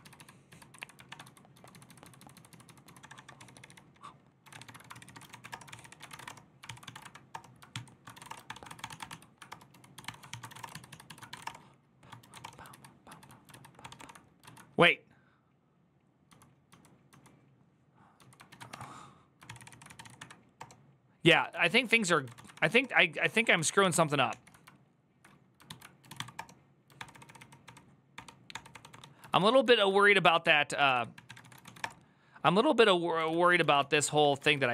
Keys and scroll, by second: 0.3 ctrl+u, 0.5 ctrl+u, 0.9 ctrl+b, 1.0-12.9 typing, 7.5 ctrl+t, 12.5 ctrl+u, 12.9 Return, 15.8-16.9 typing, 17.9-23.3 typing, 18.3 ctrl+a, 19.2 ctrl+c, 19.4 ctrl+c, 23.6 ctrl+c, 23.7 ctrl+t, 24.1 ctrl+h, 25.5 ctrl+p, 25.6-26.4 typing, 26.7 ctrl+d, 26.9 ctrl+d, 27.2 ctrl+d, 29.0 ctrl+u, 29.2 ctrl+u, 29.6 ctrl+u, 30.4-32.0 typing, 33.1 ctrl+q, 33.2 ctrl+j, 33.3 ctrl+k, 33.5 ctrl+k, 33.8 ctrl+j, 34.0 ctrl+k, 34.2 ctrl+k, 34.3 ctrl+k.